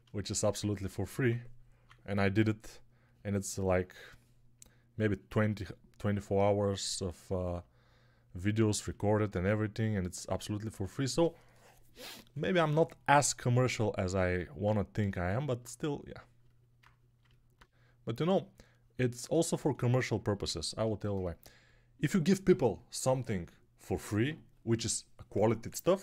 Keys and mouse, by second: 0.5 1, 1.2 [, 1.7 [, 1.7 [.